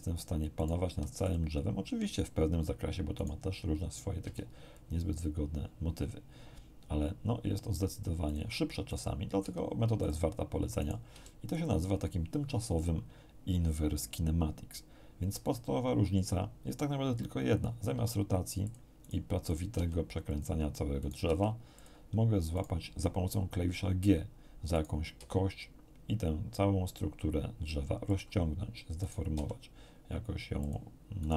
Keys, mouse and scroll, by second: 0.6 right click, 0.8 r, 1.2 click, 4.2 g, 8.2 click, 8.8 right click, 9.4 r, 10.0 click, 10.8 right click, 11.1 r, 11.5 click, 17.9 r, 18.6 click, 19.0 right click, 19.4 right click, 19.7 r, 20.2 click, 21.0 right click, 21.2 r, 21.7 click, 22.5 right click, 24.7 right click, 25.2 g, 28.0 click, 29.0 right click, 29.3 g, 30.6 click, 31.2 right click.